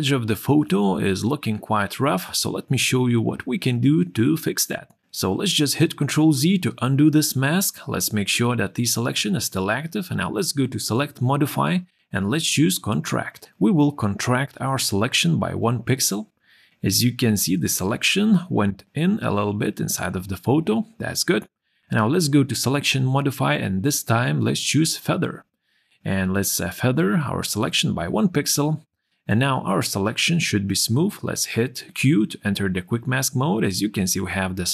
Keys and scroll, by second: 5.1 ctrl+z, 32.8 q.